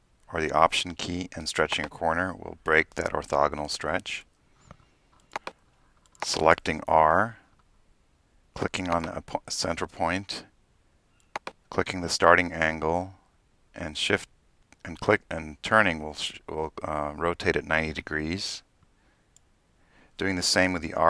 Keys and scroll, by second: 7.1 r, 7.3 r, 20.7 r, 20.9 r.